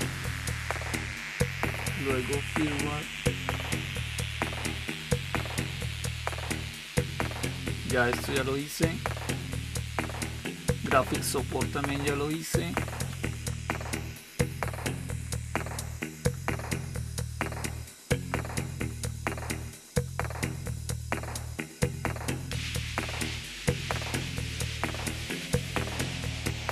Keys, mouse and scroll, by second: 3.7 Down, 4.2 Down, 5.1 Down, 10.7 Down, 11.1 Down, 11.5 Down, 11.6 Down, 11.9 Down, 12.1 Down, 12.2 Down, 12.5 Down, 12.7 Down, 12.8 Down, 13.0 Down, 13.2-16.8 Down, 17.0 Down, 17.2 Down, 17.4 Down, 17.8 Down, 17.8 Down, 18.4 Down, 18.8 Down, 19.0 Down, 19.2 Down, 19.4 Down, 19.8 Down, 20.4 Down, 21.1 Down, 21.2 Down, 21.9 Up, 22.1 Up, 22.9 Down, 25.7 Return.